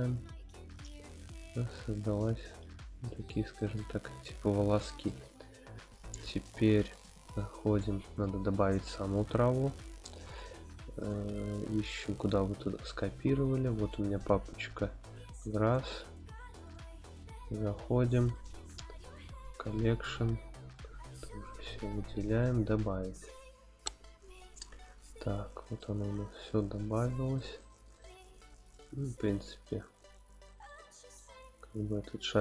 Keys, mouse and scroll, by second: 0.0-3.1 middle drag, 3.3 shift+middle drag, 3.7-5.1 middle drag, 6.9-8.3 drag, 25.8-27.4 middle drag, 27.6 g, 27.9 z, 28.7 click, 29.2 click, 30.1-30.4 scroll up 1, 30.6 scroll up 1, 30.7 shift+middle click, 31.5-32.4 scroll up 2.